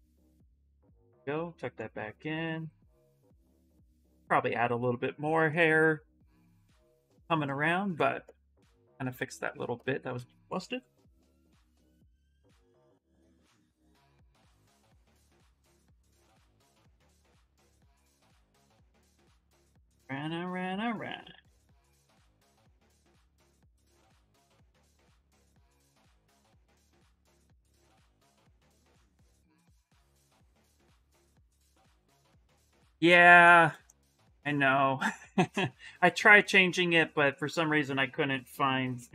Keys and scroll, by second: 8.6 shift+f, 8.9 shift+f, 9.2 shift+f, 9.9 ctrl+z, 12.3 s, 19.2 s, 28.7 s, 30.5 s, 35.5 s.